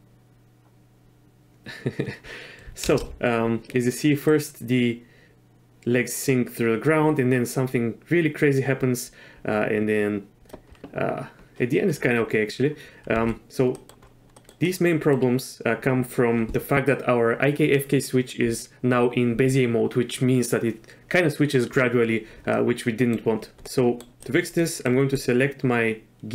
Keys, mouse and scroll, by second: 2.9 shift+space, 4.3-10.5 drag, 13.1 z, 13.8 middle drag, 14.4 middle click, 14.6-15.1 middle drag, 22.5-23.1 middle drag, 23.7-24.0 middle drag, 24.5 middle click, 25.1 click.